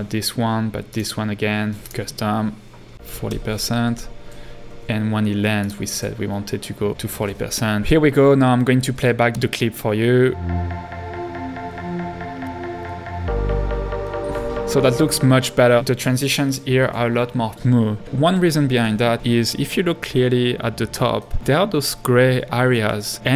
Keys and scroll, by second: 2.7-3.6 typing, 9.3 space, 14.5 space, 15.8 h.